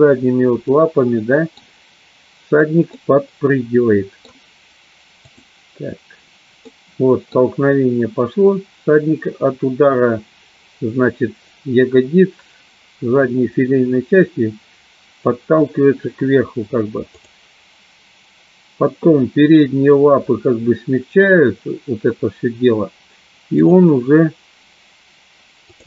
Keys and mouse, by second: 0.9 middle click, 3.1-4.4 middle drag, 5.8 click, 6.8 middle click, 17.8 click, 24.3 click.